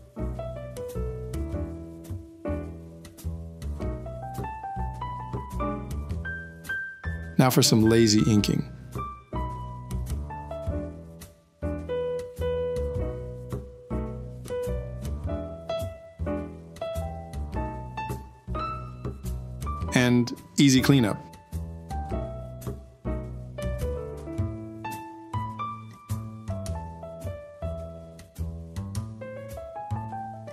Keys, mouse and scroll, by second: 2.4 ctrl+v, 2.6 Escape, 24.1 ctrl+s.